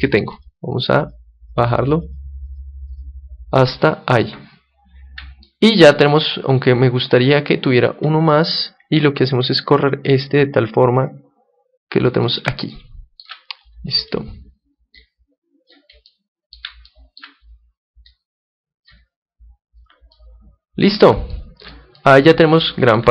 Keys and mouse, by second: 1.3-4.8 drag, 5.4-8.3 middle drag, 8.3-12.1 drag, 9.2-11.2 right drag, 12.7-14.7 middle drag, 14.0-15.7 right drag, 14.9-16.8 drag, 16.0 middle click, 16.6-18.1 middle drag, 18.1-19.8 drag, 19.7-23.1 middle drag.